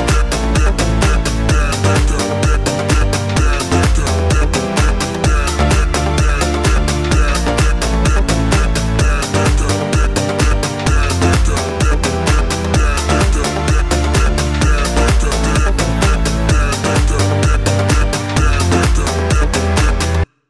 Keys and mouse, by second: 1.0 KP_1, 1.0 KP_3, 1.0 s, 2.8 g, 6.8 shift+a, 8.0 s, 8.6 s, 10.4 r, 11.0 g, 12.2-14.7 drag, 13.2 s, 13.9 s, 14.7-16.2 middle drag, 15.0 s, 16.2-17.3 drag, 16.9 s, 17.3-20.4 middle drag, 17.5 s, 19.1 s, 20.3 KP_1.